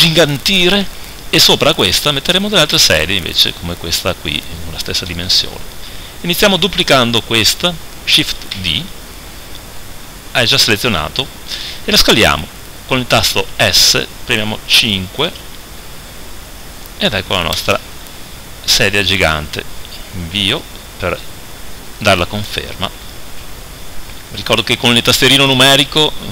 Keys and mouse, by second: 5.6-8.5 right drag, 8.5 shift+d, 18.6-23.1 middle drag, 23.1 KP_7, 24.5 KP_1, 25.5 KP_3.